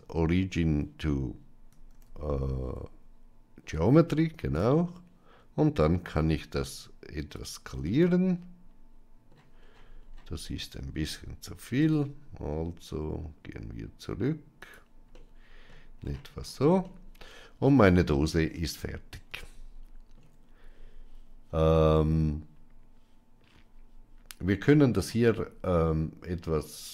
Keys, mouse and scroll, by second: 1.8 shift+s, 5.9 s, 7.7-9.2 middle drag, 11.7 s, 15.0-15.6 middle drag, 16.7-18.0 middle drag, 19.2 shift+middle click.